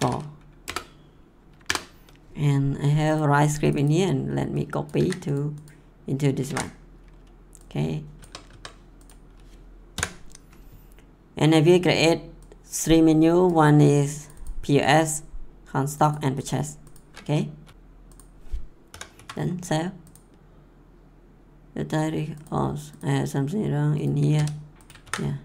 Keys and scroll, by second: 0.0-0.5 typing, 0.6 Return, 1.6 Return, 4.9 ctrl+c, 6.5 ctrl+v, 8.2 Tab, 9.9 ;, 17.6 ctrl+s, 18.9 ;, 19.1 ctrl+s, 24.3 r, 25.0 ctrl+s.